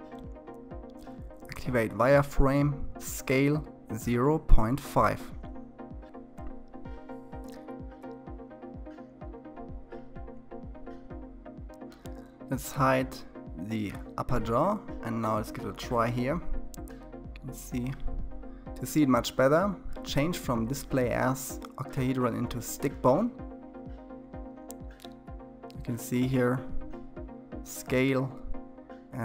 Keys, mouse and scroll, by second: 0.6-1.0 drag, 5.4 click, 6.4 middle click, 6.6-6.9 scroll up 6, 6.9 shift+z, 8.0 click, 10.8 click, 11.2-12.2 shift+middle drag, 12.2 r, 21.9 click, 23.9 r, 25.6 s, 29.1-29.2 middle drag.